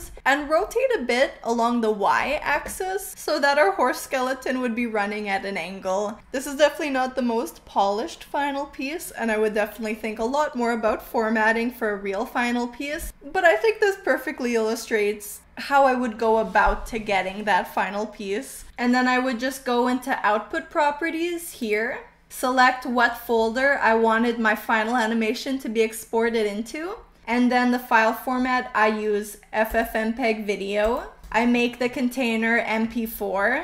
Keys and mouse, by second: 21.6 click, 29.6-31.0 drag, 31.2-33.6 drag.